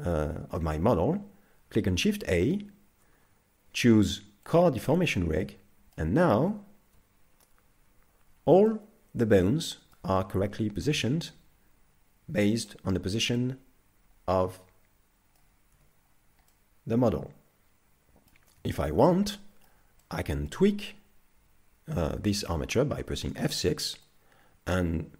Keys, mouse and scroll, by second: 2.1 shift+a, 5.4 middle click, 6.3 z, 7.9 KP_5, 8.3 scroll down 3, 8.7 middle click, 10.3 middle click, 13.3 middle click, 15.7 z, 16.5 middle click, 18.7 shift+middle click, 19.1 middle click, 20.0 middle click, 23.1 F6.